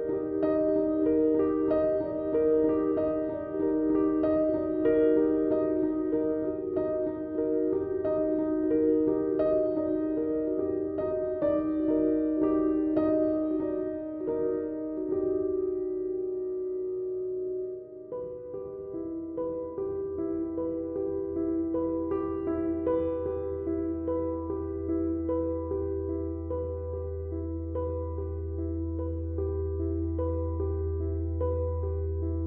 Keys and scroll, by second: 18.6 s, 29.7 Tab.